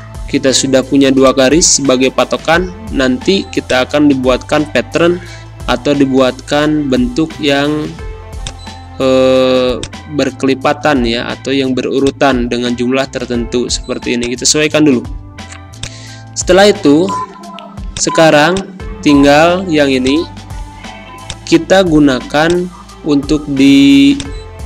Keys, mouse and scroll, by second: 1.2-5.8 drag, 5.8 space, 6.0-7.7 drag, 7.7 =, 8.3 click, 9.3 a, 9.7-13.9 drag, 13.9 space, 14.1 click, 14.4 space, 15.7 click, 16.3 Pause, 17.9 click, 18.2 space, 18.5-24.6 drag.